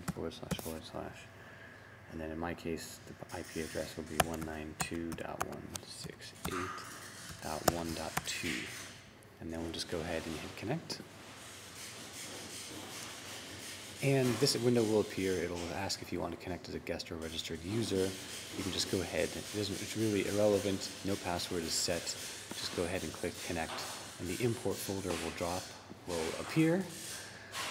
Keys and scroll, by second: 0.0-0.4 typing, 3.8-8.5 typing.